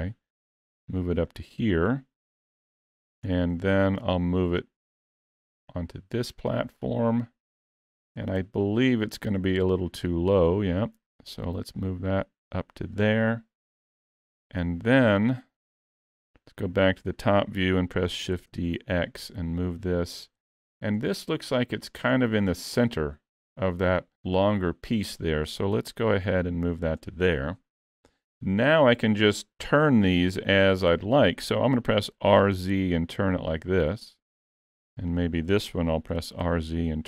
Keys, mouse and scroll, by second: 2.4 KP_Decimal, 3.3-3.6 scroll down 3, 3.6 shift+middle click, 4.6 click, 8.4 ctrl+KP_3, 10.1 click, 14.6 KP_7, 15.2-15.8 scroll down 10, 16.1 shift+middle click, 18.2 shift+d, 21.4-22.3 scroll up 4, 21.6 shift+middle click, 22.5 shift+middle click, 25.6 click, 28.8-29.6 scroll down 1, 29.8 scroll down 1, 29.9 shift+middle click, 32.1 r, 35.1 click, 36.1 r.